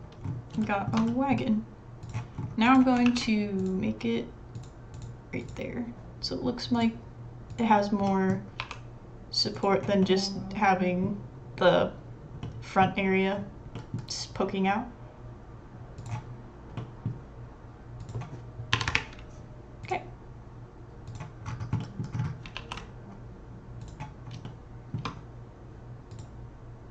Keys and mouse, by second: 0.2 middle click, 0.6 shift+middle click, 1.1 middle click, 2.0 click, 3.0 ctrl+r, 5.4 click, 6.7 click, 7.5 click, 8.0 middle drag, 8.6 e, 10.6-11.9 middle drag, 12.4 middle click, 13.7 middle click, 13.8 click, 13.9-17.3 middle drag, 18.1-19.4 drag, 19.8 click, 21.1-22.0 middle drag, 22.6 ctrl+s, 24.4 shift+middle click, 25.6 c.